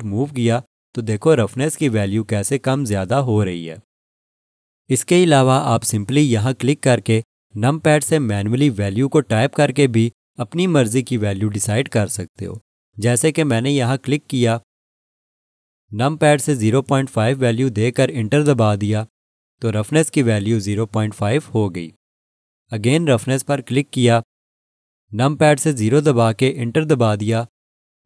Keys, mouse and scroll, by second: 14.6 click, 16.9-17.9 typing, 18.5 Return, 23.9 click, 26.9 Return.